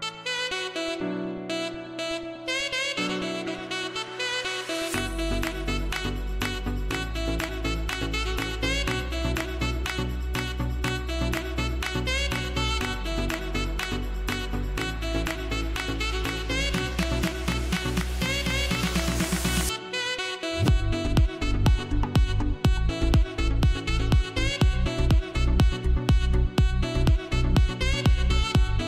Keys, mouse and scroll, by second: 1.1 click, 3.3-3.7 scroll down 1, 3.7-6.8 typing, 3.9 click, 4.5-4.9 scroll up 2, 5.0 click, 5.6 scroll up 1, 6.2 click, 7.0 click, 7.9-11.9 typing, 7.9 click, 8.2 scroll down 1, 8.4 scroll up 2, 9.9 click, 10.5 click, 11.1 click, 12.1 click, 13.5 [, 13.8 click, 16.8 ], 17.1 click, 18.9 ], 19.0 click, 19.1 [, 19.2 click, 20.6 scroll down 1, 21.6 scroll up 1, 22.4 click, 23.3 scroll down 1, 23.5 scroll up 1, 24.2 click, 24.6 scroll down 1, 25.5-26.1 scroll up 1, 26.1 scroll up 1, 26.1-27.1 typing, 26.9-28.1 scroll down 2, 28.2 scroll up 1.